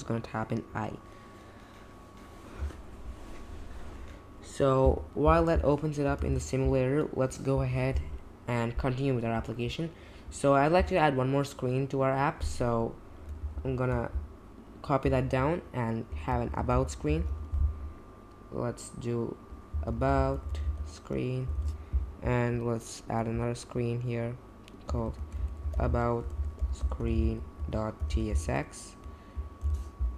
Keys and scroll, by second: 6.1 super+j, 13.5 alt+shift+Down, 16.2-17.7 typing, 19.7-21.1 typing, 21.5 super+b, 24.9-28.9 typing, 29.6 super+b.